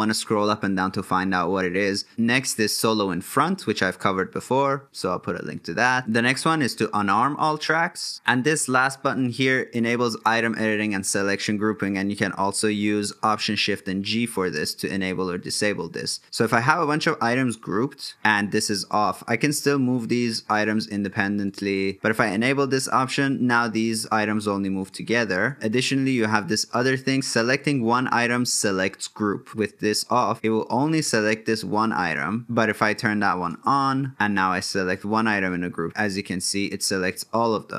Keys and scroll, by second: 12.1 alt+shift+g, 32.9 alt+shift+g.